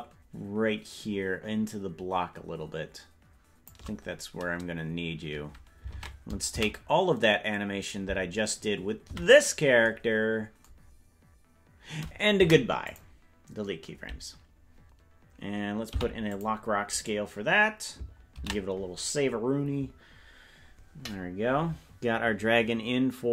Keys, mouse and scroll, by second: 7.1 ctrl+Tab, 7.1 a, 9.8 a, 12.3 Delete, 17.9 ctrl+i.